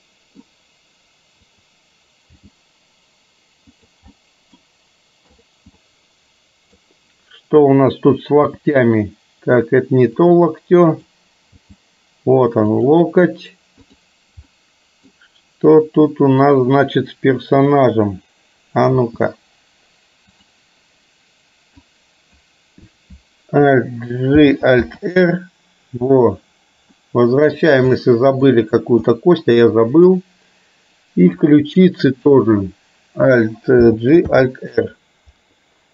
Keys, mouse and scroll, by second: 1.6 click, 2.3 g, 4.2-4.7 middle drag, 5.4 click, 5.9-6.8 middle drag, 8.6 g, 11.7 g, 13.9 click, 14.6 middle click, 19.1 r, 21.8-22.6 drag, 24.4 alt+g, 24.8 alt+r, 27.1-27.7 middle drag, 28.1-28.6 middle drag, 29.2-30.2 middle drag, 31.4 drag, 32.2 shift+click, 33.8 alt+g, 34.3 alt+r.